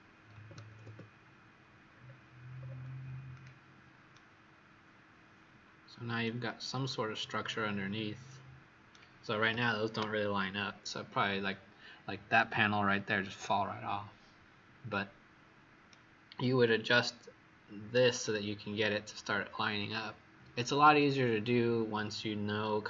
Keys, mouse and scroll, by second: 0.3 KP_8, 0.4 KP_0, 0.8 Return, 1.8-2.5 scroll down 4, 2.5-3.1 scroll up 1, 3.2-4.1 scroll up 5, 4.1 right click, 6.6-7.4 scroll up 2, 7.4 right click, 7.4 scroll up 2.